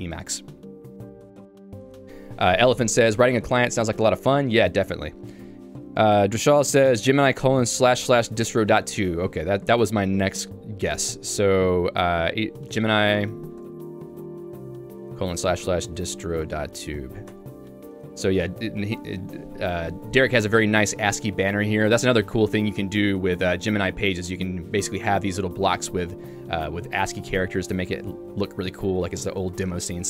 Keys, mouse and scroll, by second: 17.4 Return, 22.8 j, 24.7 k, 26.5 j, 29.0 ctrl+d, 29.6 ctrl+d.